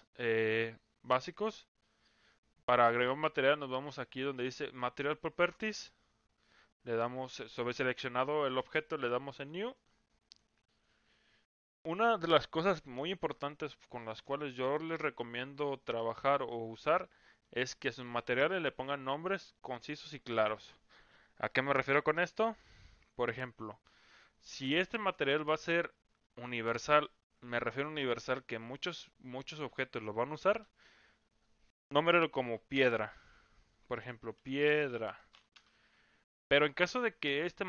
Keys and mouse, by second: 9.8 click, 10.4-11.5 drag, 17.4-35.6 drag.